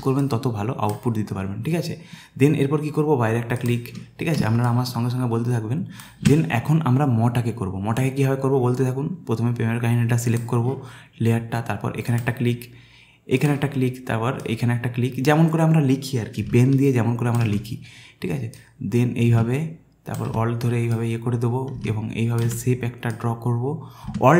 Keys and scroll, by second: 4.4 space.